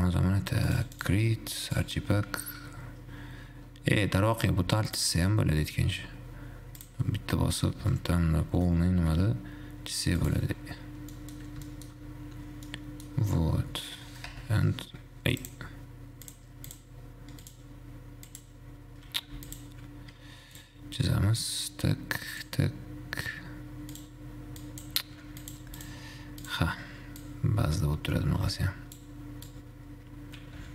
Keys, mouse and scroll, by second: 0.9 click, 1.9-4.9 drag, 5.1-8.1 drag, 11.4 middle click, 11.6-11.9 scroll down 1, 11.9-12.4 shift+middle drag, 12.4-12.9 scroll down 1, 12.9-15.6 middle drag, 15.6 click, 16.4 click, 17.6-19.5 drag, 19.5 x, 20.9-23.9 drag, 24.9 click, 25.6 click, 25.9 x, 26.6-29.6 drag.